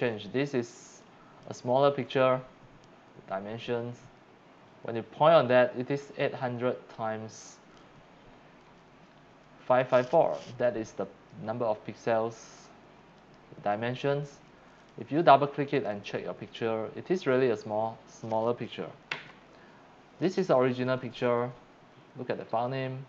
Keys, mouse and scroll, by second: 1.0 click, 13.2 right click, 14.8 click, 15.8 click, 15.9 click, 19.1 Right.